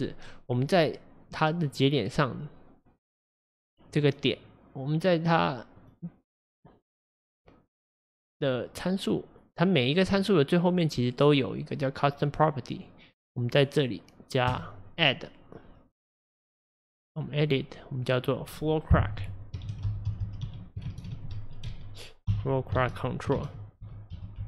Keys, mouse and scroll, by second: 14.6-24.4 drag.